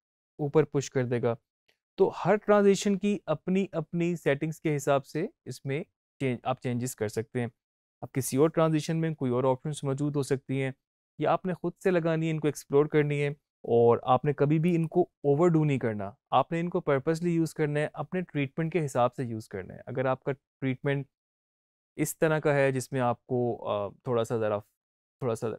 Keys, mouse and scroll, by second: 1.9 space, 14.5 click.